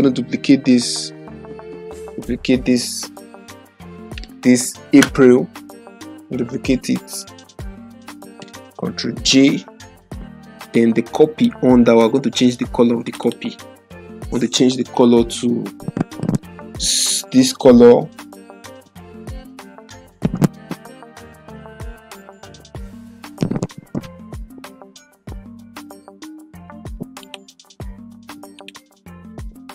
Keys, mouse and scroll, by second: 9.0 ctrl+j, 10.7-11.7 drag, 18.0-18.8 typing, 22.1-24.5 typing, 27.3 click.